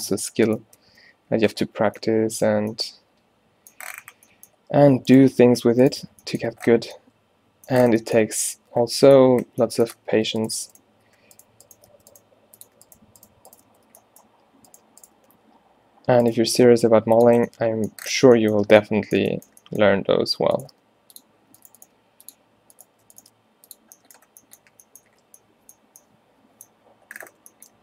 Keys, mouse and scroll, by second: 0.9 f, 1.5 a, 1.7 a, 2.0 middle click, 5.9 g, 6.6 a, 7.7 middle click, 7.7 a, 12.0 f, 12.3 g, 13.8 f, 15.5 g, 16.5 shift+Tab, 16.7 g, 20.9 g, 21.6 g, 22.0 g, 23.4 g, 24.8 a, 25.9 a.